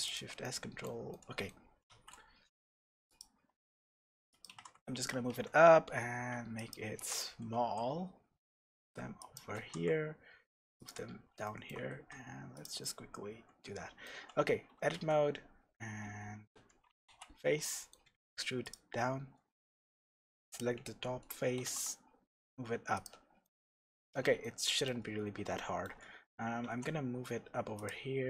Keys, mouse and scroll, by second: 0.4-4.4 shift+middle drag, 1.9 shift+a, 3.6 s, 4.4 click, 4.5 g, 5.0 click, 5.3 s, 6.7 click, 7.0 g, 9.3 click, 9.5 g, 10.8 click, 11.0 scroll up 1, 11.4-12.6 shift+middle drag, 11.9 g, 12.6 click, 12.8-18.7 middle drag, 14.1 Tab, 14.9 e, 16.6 Escape, 17.0 f, 18.0 e, 18.7 click, 20.5 click, 21.5 g, 23.0 click, 23.4-27.8 middle drag, 25.2-25.5 scroll up 2, 26.0-26.6 scroll up 2, 26.6 e, 27.8 click.